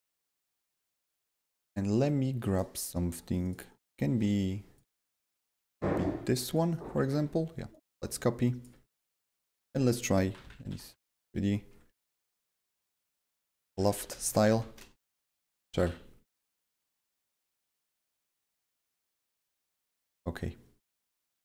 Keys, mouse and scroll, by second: 0.2 click, 0.6-1.7 drag, 1.7 click, 2.0 click, 2.2-7.7 drag, 3.4 right click, 7.8-10.2 shift+drag, 9.8-11.5 typing, 14.0-16.3 typing, 14.5 click, 20.0 click, 21.1 click.